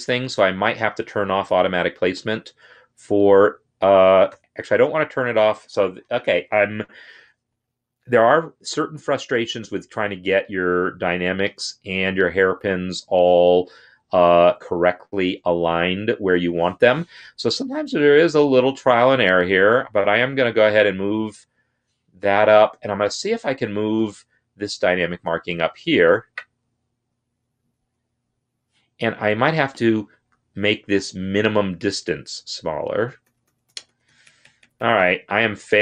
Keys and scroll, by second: 4.2 ctrl+z, 19.3 Down, 19.8 Down, 20.4 Up, 21.2 Up, 26.1 Down, 27.0 Down, 27.6 Down, 27.9 Down, 30.5 ctrl+a, 32.0 Down, 32.4 Down, 32.6 Down, 32.7-33.9 Down.